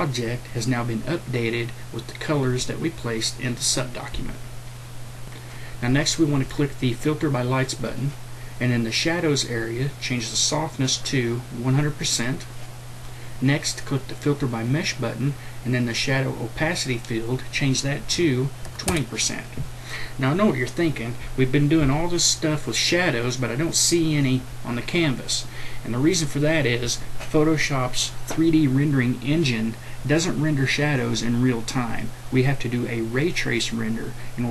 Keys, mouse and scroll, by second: 10.9-12.9 drag, 18.1 KP_2, 18.6 KP_2.